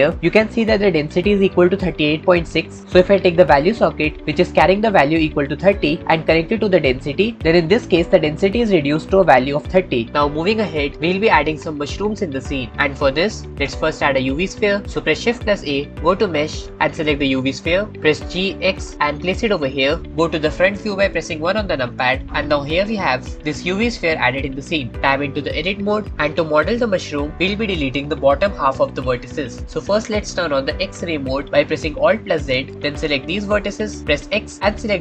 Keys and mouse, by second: 6.1-7.4 drag, 15.5 shift+a, 18.1 g, 18.4 x, 19.9 middle click, 20.1 KP_1, 22.6-23.3 shift+middle drag, 23.3 shift+click, 23.7-24.1 shift+drag, 25.7 Tab, 32.4 alt+z, 32.9 click, 34.0 x.